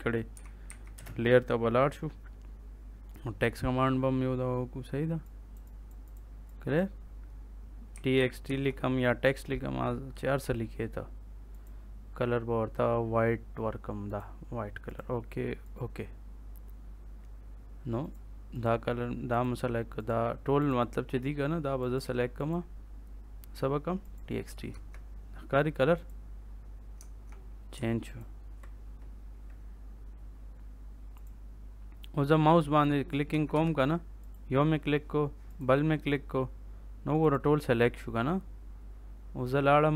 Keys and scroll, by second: 0.3 l, 0.6 a, 0.9 space, 7.6-8.9 typing, 24.7 Escape, 26.9 Caps_Lock, 33.2 Escape.